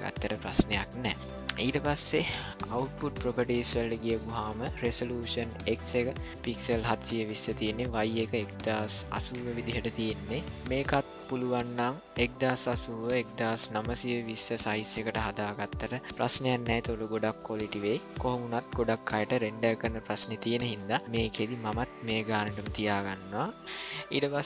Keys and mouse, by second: 2.6 click.